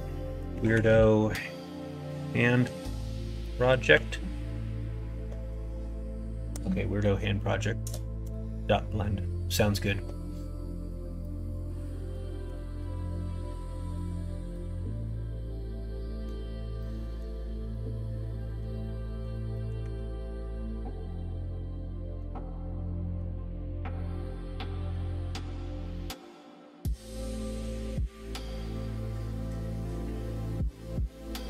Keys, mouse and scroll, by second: 11.2 middle click, 14.1 ctrl+KP_Subtract, 14.5-16.2 middle drag, 16.8 middle click, 17.7 middle click, 18.8 middle click, 19.3 click, 19.5 middle click, 21.4 Tab, 21.4 middle click, 22.5 middle click, 24.2 middle click, 25.9 middle click, 27.8 b, 30.5-31.4 drag.